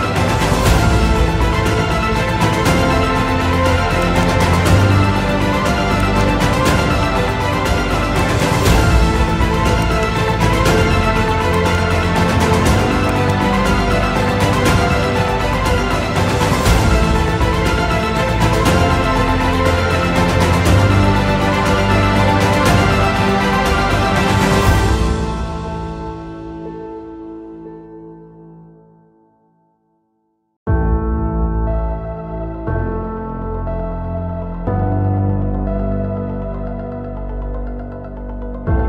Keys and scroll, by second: 2.9 shift+F2, 5.1 ctrl+z, 10.9 Escape, 12.5 Delete, 16.0 ctrl+Page_Down, 17.5 shift+Page_Down, 17.9 ctrl+Page_Up, 19.6 F2, 23.4 F4, 27.2 Delete, 28.0 F2, 32.6 F2, 34.0 Escape, 37.2 space.